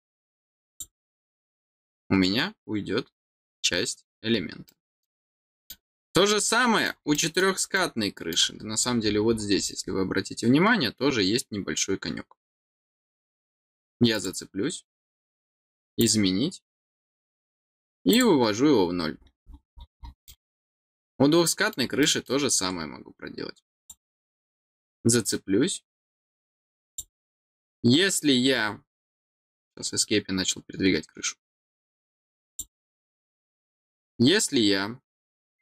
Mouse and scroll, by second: 0.6 click, 1.7 middle click, 4.2 scroll down 2, 4.6 middle click, 5.3 middle click, 6.4 middle click, 7.1 middle click, 7.7 middle click, 9.5 scroll up 2, 9.8-13.2 scroll down 2, 13.2-14.1 scroll down 1, 14.1 click, 15.9 click, 18.0 click, 19.1-19.7 scroll down 4, 19.9 scroll up 2, 20.2 middle click, 20.9 middle click, 21.9 middle click, 23.8 click, 26.8 click, 32.4 click.